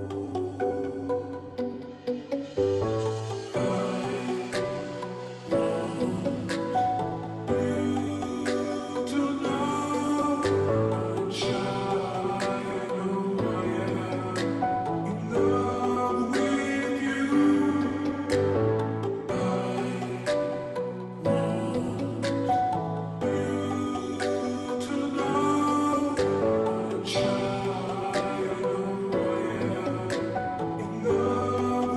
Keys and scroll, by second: 0.4 [, 14.4 [, 23.1 ], 23.4 ], 24.2 ], 24.5 ], 25.6 ], 25.8 ], 26.9 ], 27.9 ], 28.1 ].